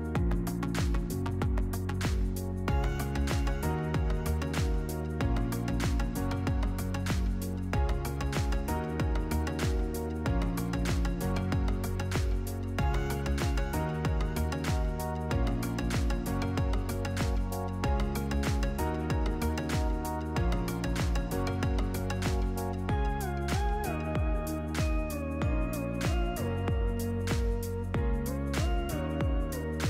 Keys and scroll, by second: 1.8 ctrl+-, 22.1-24.7 typing, 29.1 Delete.